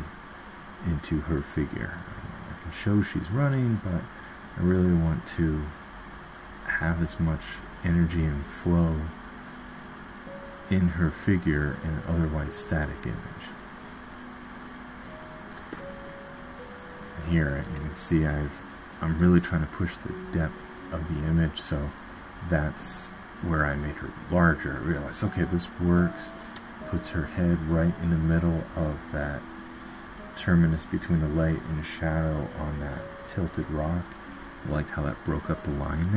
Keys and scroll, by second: 7.0 ctrl+z, 34.0 ctrl+z, 34.8 typing.